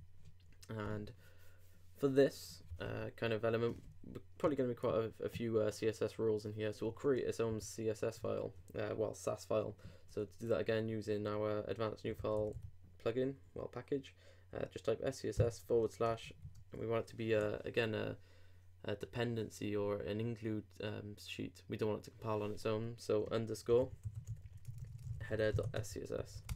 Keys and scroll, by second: 7.5 alt+super+n, 16.1 shift+/.